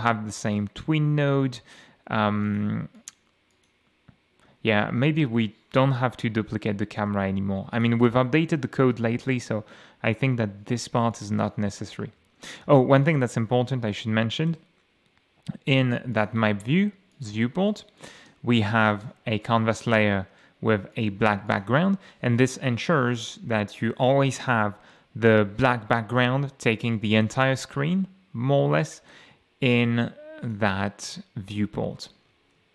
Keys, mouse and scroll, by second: 2.4 click, 2.9 click, 3.5 click, 7.0 m, 7.7 click, 8.1 m, 11.1 click, 12.3 m, 13.1 click, 14.5 F8, 16.1 click, 17.1 click, 17.7-18.3 shift+drag, 18.9 shift+Delete, 19.4 shift+click, 20.9 click, 21.5 click, 30.4 click, 32.4 ctrl+s.